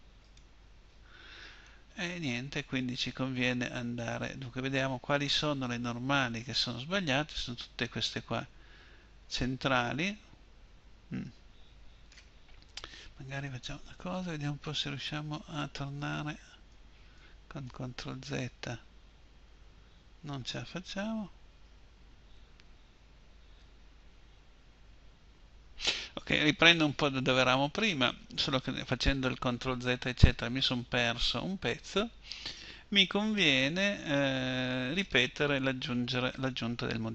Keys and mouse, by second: 12.8 ctrl+z, 14.0 ctrl+z, 14.7 ctrl+z, 15.4 ctrl+z, 15.9 ctrl+z, 16.3 ctrl+z, 16.8 ctrl+z, 17.3 ctrl+z, 18.0 ctrl+z, 19.1 ctrl+z, 19.6 ctrl+z, 27.3-29.1 middle drag, 37.0 click.